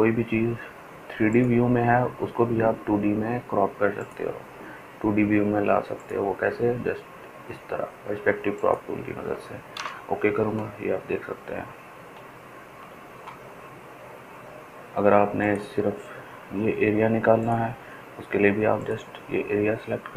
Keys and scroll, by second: 1.1 ctrl+alt+z, 15.5 ctrl+alt+z.